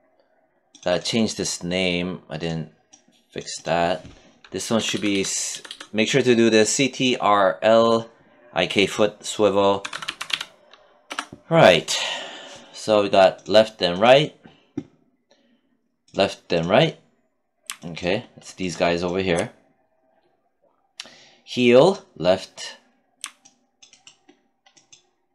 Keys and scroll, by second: 4.2 BackSpace, 9.2 r, 10.5 Return.